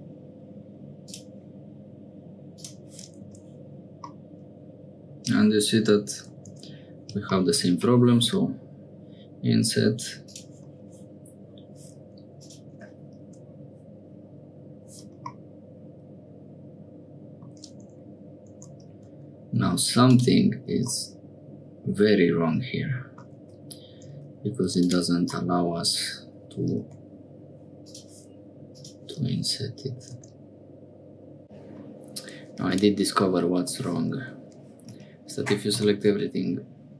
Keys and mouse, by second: 2.5 click, 3.3 Tab, 4.1-6.3 middle drag, 8.2 i, 12.4-14.2 drag, 15.3-17.5 middle drag, 17.8 Tab, 18.5 Tab, 18.9 a, 19.7 3, 20.0 click, 20.9-22.3 drag, 22.3 middle click, 23.4 Tab, 24.0 Tab, 24.6 3, 24.8 click, 25.4 middle click, 26.9 i, 30.3 i, 31.4 ctrl+z, 31.5 ctrl+z, 31.6 click, 32.5 3, 32.6 click, 33.2 click, 34.9 a, 35.7 m.